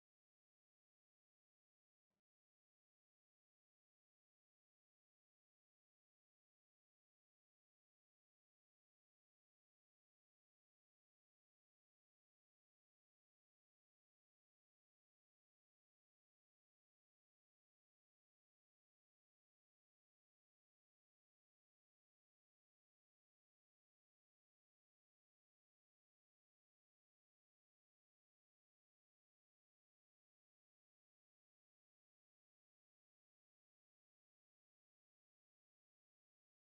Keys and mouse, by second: 1.5-7.0 middle drag, 3.2-4.7 drag, 3.2-4.7 right drag, 5.4-7.3 drag, 7.9 middle click, 8.2 Tab, 11.5-12.7 drag, 11.5-17.8 right drag, 25.1 e, 27.7 s, 32.7 Tab.